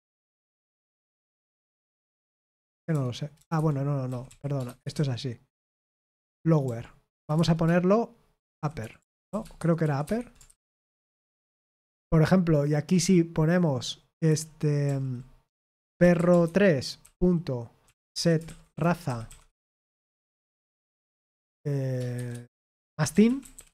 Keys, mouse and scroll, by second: 0.7-1.3 typing, 2.4-20.2 typing, 3.5 Escape, 22.7-23.7 typing.